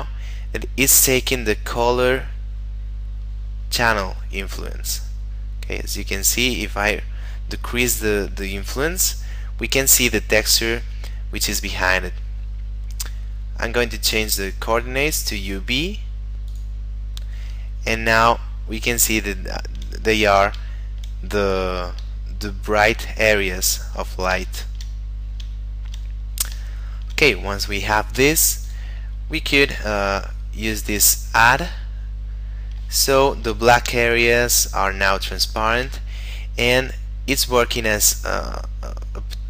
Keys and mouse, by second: 5.0 click, 13.2 middle click, 14.7 click, 17.9 shift+middle click, 20.9 shift+middle click, 22.3 shift+middle click, 23.7 middle click, 24.6 shift+middle click, 25.0 middle click, 25.7 shift+middle click, 26.1 middle click, 26.8 shift+middle click, 27.8 middle click, 28.7 click, 31.0 click, 33.2 shift+middle click, 35.6 shift+middle click, 37.1 middle click.